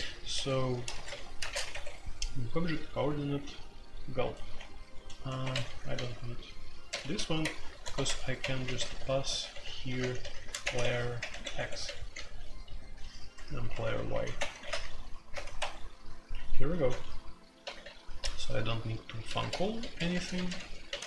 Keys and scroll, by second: 0.0-15.3 typing, 11.5 Escape, 15.5 Escape, 16.7-18.2 typing, 16.9 Tab, 19.2-21.0 typing.